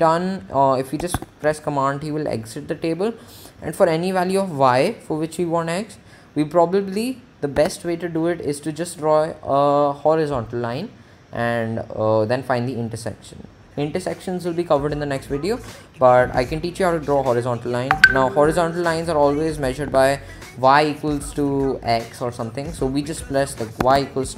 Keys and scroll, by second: 1.6 t, 7.9 Tab, 18.8 Escape, 20.2 Tab, 23.6-24.3 typing.